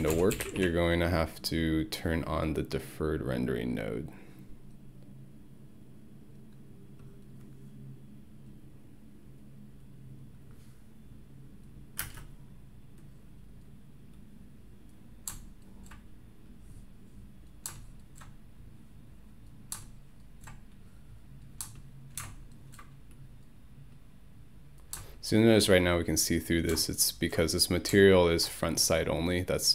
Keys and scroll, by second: 0.0 ctrl+a, 0.1-2.1 typing, 12.1 space.